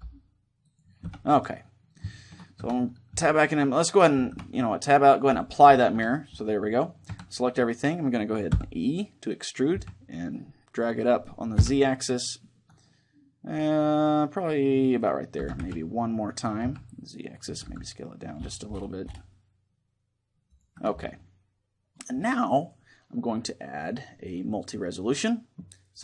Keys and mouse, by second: 0.8 Tab, 2.3 Tab, 2.3-4.0 middle drag, 3.4 a, 4.0 Tab, 5.0-7.0 drag, 5.6 Tab, 6.0-8.2 middle drag, 6.8 a, 8.2 e, 14.8-16.6 drag, 15.1 e, 17.1-19.5 drag, 17.4 s, 20.3-24.4 drag, 20.5 Tab, 25.6-26.0 drag.